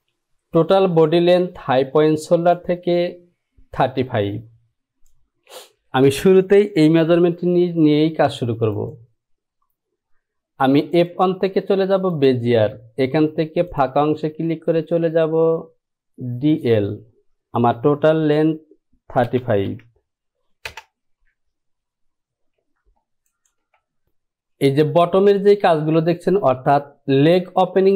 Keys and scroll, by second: 19.4 KP_3, 19.8 KP_5, 20.8 Return.